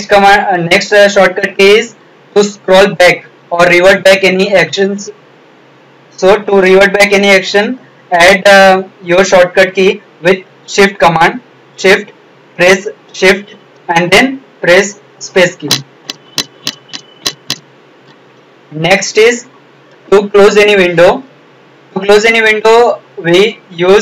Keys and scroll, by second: 14.6 shift+space.